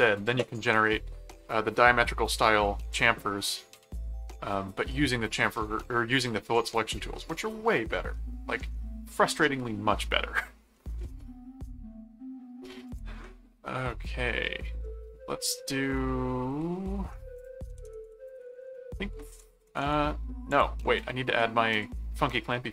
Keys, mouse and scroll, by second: 3.4 middle click, 4.9 middle click, 6.8 middle click, 8.2 middle click, 10.7-12.0 middle drag, 12.8 click, 13.2-17.2 middle drag, 17.3-19.6 typing, 17.3 click, 20.5 click, 21.4 middle click.